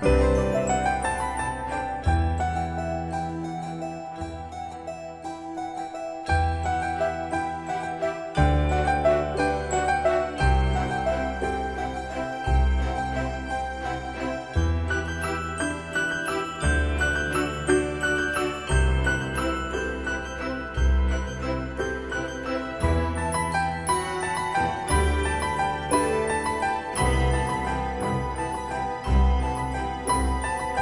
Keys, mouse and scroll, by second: 2.2-2.6 typing, 4.0 click, 6.1-7.3 typing, 8.0 Return, 9.7 click, 11.9-12.9 typing, 13.5 Return, 14.9 click, 16.1 Return, 19.4 click, 20.2-20.9 scroll up 1, 21.9-23.9 typing, 24.9-26.2 scroll up 1, 28.2 click, 30.2-30.8 typing.